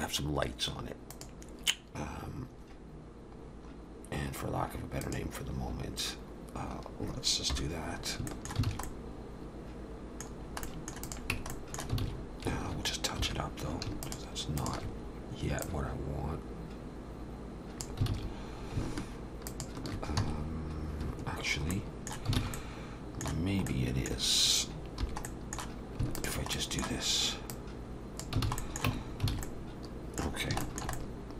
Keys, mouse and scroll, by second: 3.5-5.0 scroll down 2, 5.0 click, 5.0-6.6 scroll down 1, 7.5 /, 8.0 scroll up 2, 8.3 shift+middle click, 8.7 alt+a, 8.8 middle click, 10.3-10.6 scroll down 2, 10.6 middle click, 11.0 click, 11.3 Tab, 11.5 middle click, 12.0 alt+a, 12.2-12.7 scroll up 2, 13.2 2, 14.0 alt+shift+click, 14.6 alt+shift+click, 15.6 click, 18.1 alt+a, 19.5 alt+shift+click, 20.2 x, 21.7 middle click, 22.4 alt+a, 22.6 middle click, 24.8 middle click, 25.0 3, 25.3 middle click, 26.2 alt+shift+click, 26.5 middle click, 27.5 click, 28.5 alt+a, 28.6 middle click, 28.9 Tab, 29.1 scroll down 2, 29.3 alt+a, 29.4 middle click, 30.4 scroll down 2, 30.7 shift+middle click, 30.9 middle click.